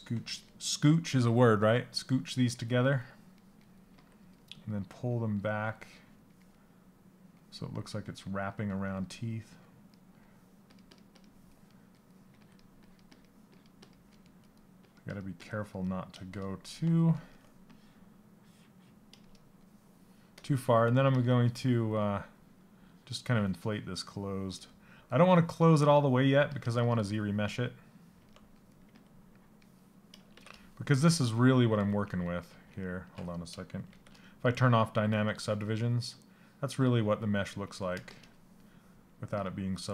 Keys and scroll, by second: 29.9 shift+d, 31.4 ctrl+z, 33.5 shift+d.